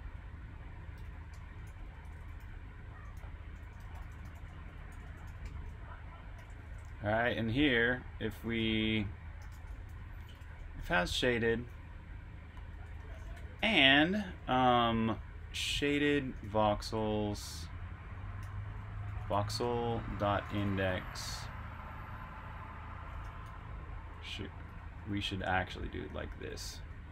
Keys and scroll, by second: 0.6-5.8 typing, 12.8-14.1 typing, 15.3-16.8 typing, 18.1-21.9 typing, 23.1 Escape, 23.3-24.2 typing.